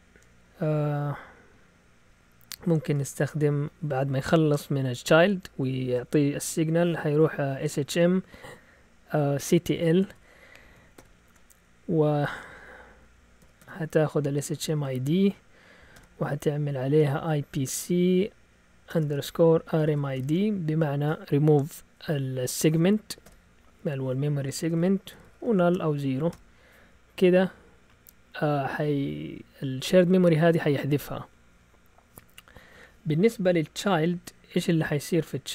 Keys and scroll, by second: 2.6-3.6 typing, 9.5-11.0 typing, 12.9-15.9 typing, 17.0-20.6 typing, 24.4-26.8 typing, 34.4-35.5 typing.